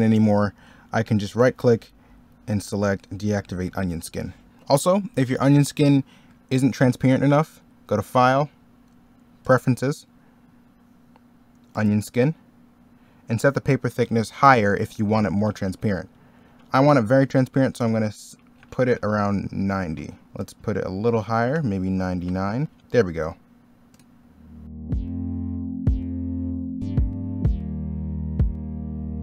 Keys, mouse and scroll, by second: 1.2 right click, 3.7 middle click, 25.0 middle click, 26.1 ctrl+z, 26.6 ctrl+z, 27.1 ctrl+z, 27.5 ctrl+z, 27.9 i, 28.1 e, 28.2 b, 28.5 ctrl+z, 29.1 ctrl+z.